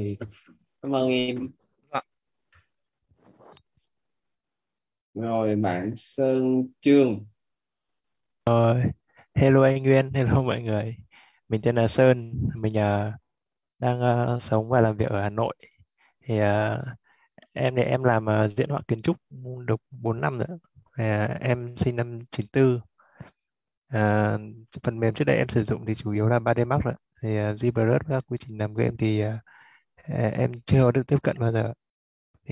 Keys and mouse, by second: 1.0 click, 2.4 click, 8.0 click, 16.8-19.4 typing, 20.9-26.1 typing, 26.3 Left, 28.9 9, 29.7 4, 30.0 shift+,, 30.7 space, 31.0 Right.